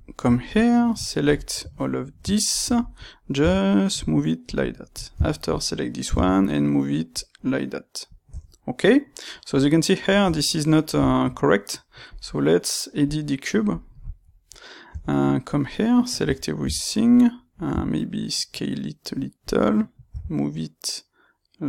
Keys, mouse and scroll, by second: 0.7 click, 1.1 ctrl+right click, 3.3 g, 4.8 click, 5.2 shift+click, 6.0 g, 7.2 click, 8.2 Tab, 8.9-12.0 middle drag, 10.2 Tab, 12.0 click, 12.9 click, 13.6 click, 14.8 Tab, 15.4 middle click, 16.1 a, 17.1 middle click, 17.7 s, 19.5 click, 20.1 g.